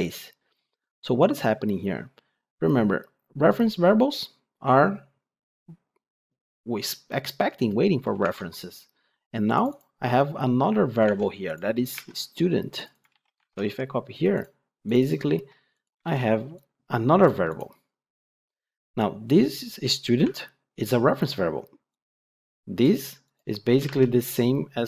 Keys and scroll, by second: 11.9 ctrl+Tab, 13.0 ctrl+c.